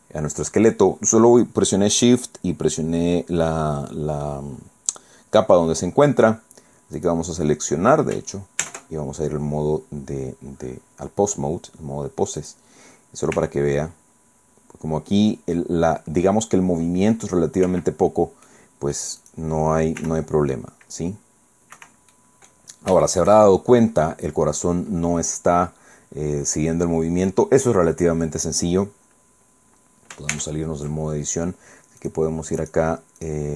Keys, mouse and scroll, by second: 6.4 scroll down 2, 7.0 right click, 8.6 ctrl+Tab, 12.4 right click, 13.3 r, 17.7 Escape, 18.5 click, 19.2 right click, 20.0 r, 21.7 Escape, 22.1 click, 22.9 shift+scroll up 1, 23.1 shift+click, 23.1-23.4 shift+scroll down 1, 23.4 shift+click, 30.3 ctrl+Tab, 32.0 click, 32.6 click, 33.2 click.